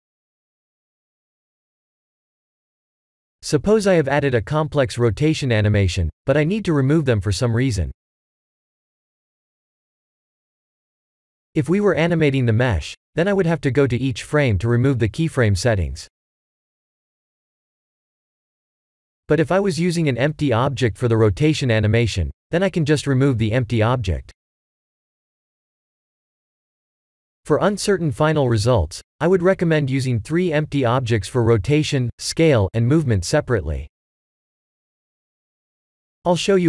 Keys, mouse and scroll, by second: 0.8-2.9 drag, 4.6 click, 12.1 click, 13.2 click, 13.8 middle click, 35.8 shift+a.